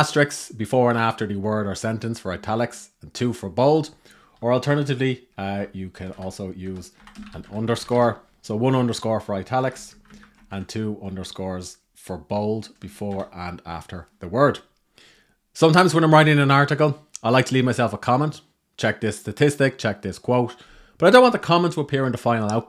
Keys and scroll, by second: 4.3 shift+-, 9.3 shift+-, 9.5 alt+Left, 10.1 alt+Right, 10.7 Left, 12.1 Left, 12.7 shift+-.